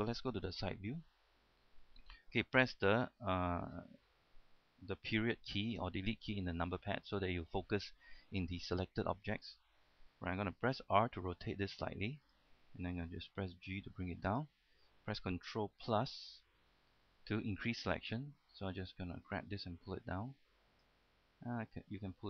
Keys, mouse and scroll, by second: 0.8 KP_3, 1.5 scroll up 1, 1.6-2.8 scroll down 1, 6.1 KP_Decimal, 7.4 scroll down 1, 9.0 shift+middle click, 11.3 r, 12.6 click, 13.6 g, 14.6 click, 19.1-21.9 drag.